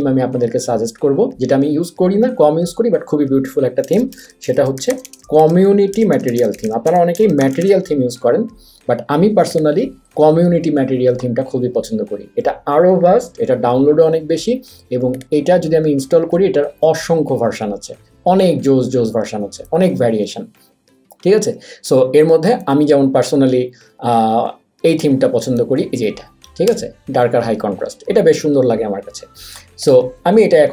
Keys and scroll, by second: 3.6-8.1 typing, 16.8 Down, 17.1 Down, 17.2 Down, 17.6 Down, 17.9 Down, 18.3 Down, 18.5 Down, 18.8 Down, 19.1 Down, 19.8 Up, 20.0 Up, 21.5 Up, 22.0 Up, 22.9 Down, 23.2 Down, 24.2 Up, 24.4 Up, 24.7 Up, 25.0 Up, 25.7 Down, 26.7 Return.